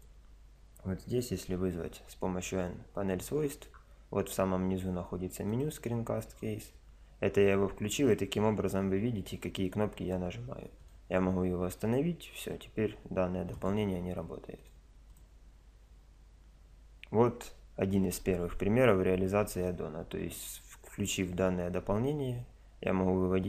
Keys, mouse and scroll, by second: 1.3 n, 4.2 click, 5.5-7.4 drag, 8.7 n, 9.1 n, 10.8 click, 14.6-19.0 drag.